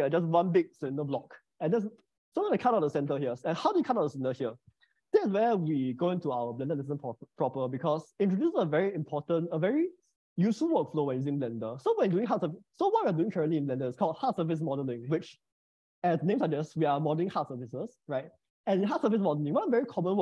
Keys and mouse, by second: 1.3 click.